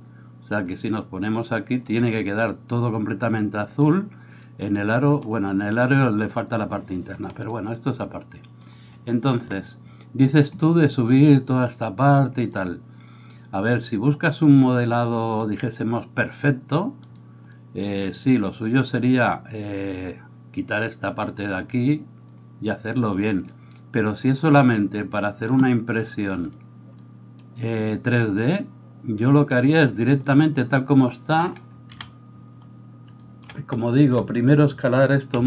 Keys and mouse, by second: 31.9 KP_3, 35.3 s.